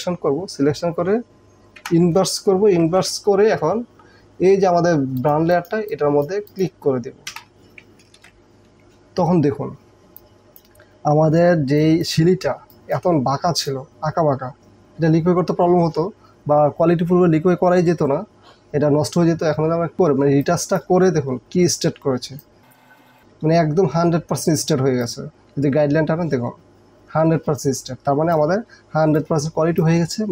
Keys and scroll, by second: 1.8 ctrl+shift+i, 7.4 Delete, 8.0 ctrl+Delete, 8.2 ctrl+d, 9.9 space, 12.7 space, 22.1 space, 23.0 space, 28.9 space.